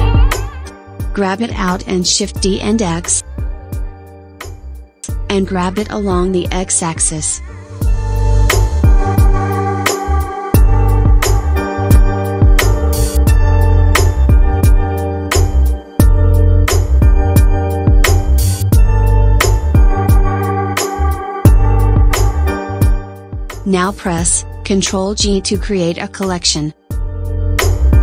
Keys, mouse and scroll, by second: 1.3 shift+d, 4.5 shift+d, 8.9 s, 12.1 click, 13.3 s, 16.3 s, 18.4-18.8 drag, 19.8 click, 20.6 s, 23.7-24.1 drag, 27.9 ctrl+g.